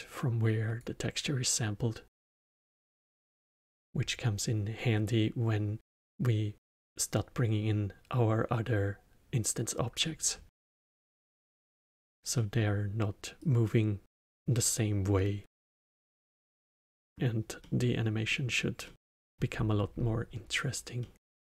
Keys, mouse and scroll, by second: 2.2-5.2 drag, 10.4-13.3 alt+middle drag, 13.3-16.0 drag, 16.0 middle click, 16.5-16.9 scroll down 2, 16.9-21.4 middle drag.